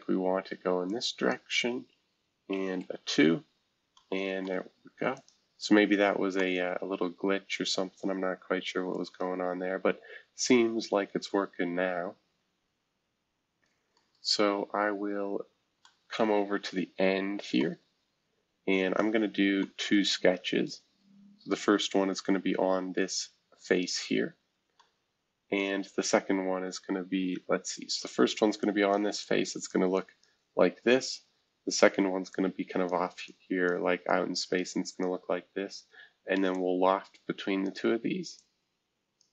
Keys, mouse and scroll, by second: 0.8 click, 2.8 Tab, 3.9-5.3 middle drag, 8.9 right click, 13.9-15.4 middle drag, 15.4-15.8 scroll down 1, 17.6 middle click, 18.5-19.5 scroll up 1, 19.5 scroll up 1, 19.6-22.0 middle drag, 24.4-24.8 scroll down 2, 25.6 middle click, 26.3 scroll down 3, 27.3 F2, 28.0-31.6 drag, 32.3-36.5 drag, 37.6-39.3 drag.